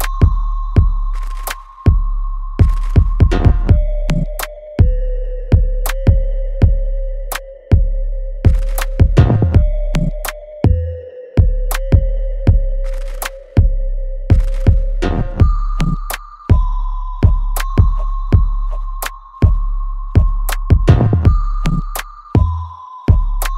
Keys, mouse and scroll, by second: 1.4-2.0 scroll down 1, 2.0-4.9 middle drag, 4.9-10.7 drag, 10.7-11.1 scroll up 1, 11.1 click, 19.5 click, 20.5 alt+right click, 21.0-23.5 alt+drag.